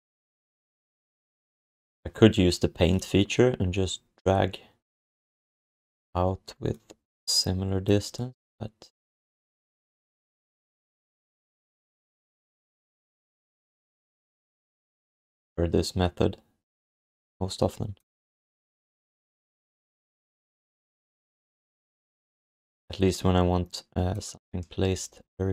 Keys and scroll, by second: 24.8 q.